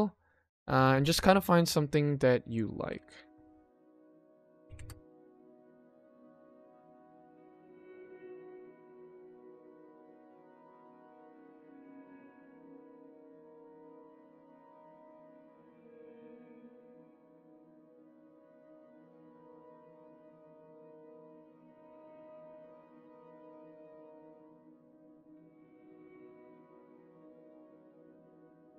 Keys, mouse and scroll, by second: 2.5 click, 4.1 click, 5.7 g, 6.4 s, 7.6 click, 8.4 click, 14.8 click, 15.9 click, 16.5 g, 18.4-19.4 drag, 20.2 click, 20.5 ctrl+s, 20.7 click, 24.1 click, 24.5 click, 24.9 ctrl+s, 26.6 click, 28.0-28.7 drag.